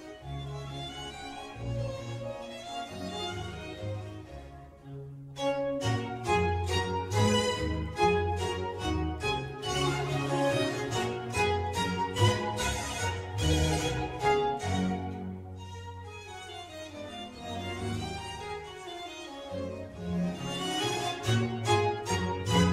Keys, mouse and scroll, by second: 0.4-2.4 middle drag, 2.4-2.7 scroll down 1, 2.9 s, 9.8 s, 16.0 scroll up 2, 16.2-17.7 scroll down 2, 17.7 g.